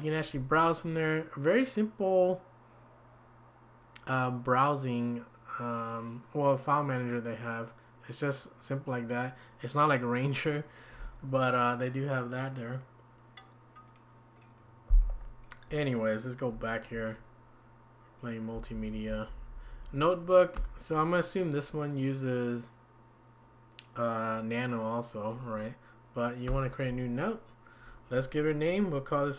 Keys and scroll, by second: 16.5 Escape, 18.5 Down, 18.7 Down, 18.9 Down, 19.1 Down, 19.4 Down, 19.5 Down, 19.7 Down, 19.8 Down, 20.5 Return, 26.5 Return.